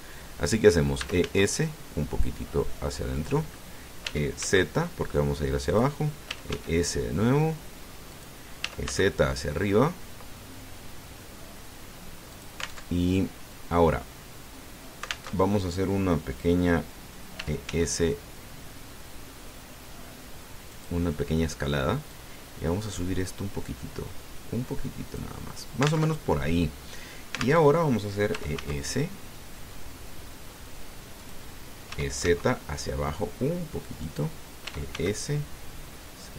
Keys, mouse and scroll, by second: 1.8 e, 2.0 s, 3.9 click, 4.8 e, 5.2 z, 6.5 click, 7.1 e, 7.3 s, 8.9 click, 9.4 e, 9.6 z, 13.1 alt+click, 13.6 alt+Tab, 16.1 alt+Tab, 18.1 e, 18.4 s, 21.5 click, 22.9-26.2 drag, 26.9 alt+Tab, 28.4 alt+Tab, 29.1 e, 29.4 s, 32.0 click, 32.7 e, 33.0 z, 34.8 click, 35.4 e, 35.7 s.